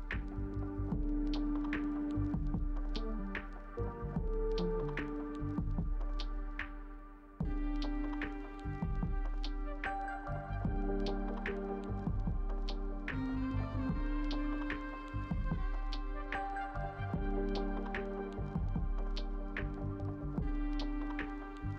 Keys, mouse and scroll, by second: 3.7 space, 5.6 double click, 14.1 ctrl+space.